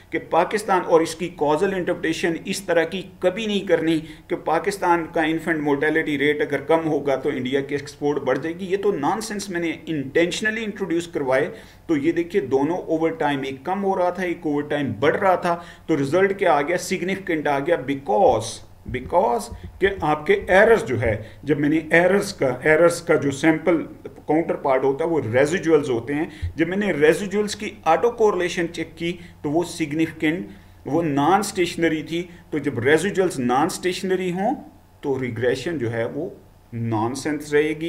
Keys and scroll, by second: 18.9 Down, 19.5 Down, 19.9 Down, 20.5 Down.